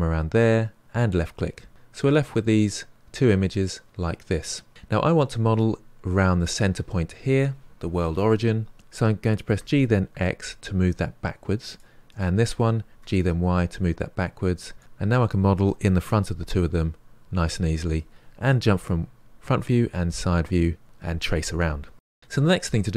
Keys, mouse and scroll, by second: 1.5-3.3 middle drag, 3.3-4.2 scroll up 1, 4.2-4.7 scroll down 2, 4.7-7.7 middle drag, 8.7 g, 9.5 g, 12.1 click, 12.9 g, 16.5-19.0 middle drag, 19.0 KP_1, 19.8 KP_3, 21.9-22.9 middle drag.